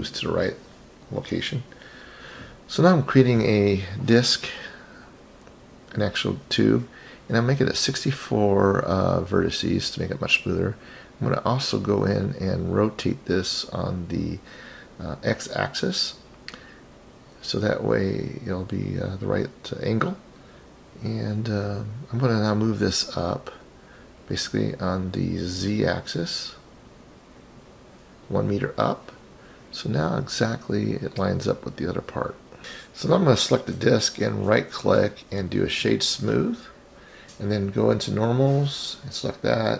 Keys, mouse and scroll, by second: 1.2-6.2 drag, 8.3-11.4 right drag, 11.9-14.6 drag, 25.5-28.6 drag, 35.0 right click, 37.9 click, 39.1 click.